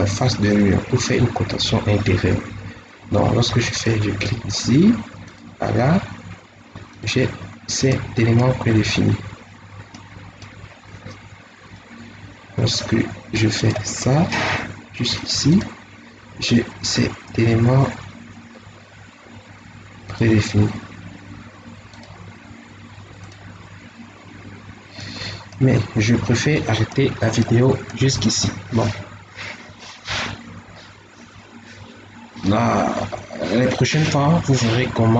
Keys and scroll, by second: 20.5 Escape, 24.3 Escape, 25.8 Escape.